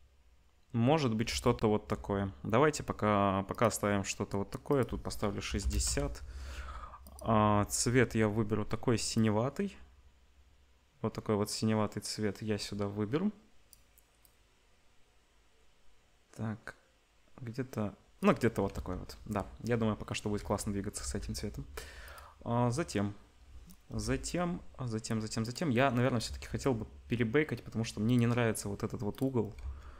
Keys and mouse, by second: 1.3 ctrl+s, 3.5 click, 4.7-7.1 drag, 18.7 ctrl+s, 19.9-20.9 middle drag, 20.3 z, 21.0 ctrl+s, 23.4 ctrl+s, 23.8 KP_0, 25.4 click, 26.3 s, 29.1 click, 29.8 ctrl+s.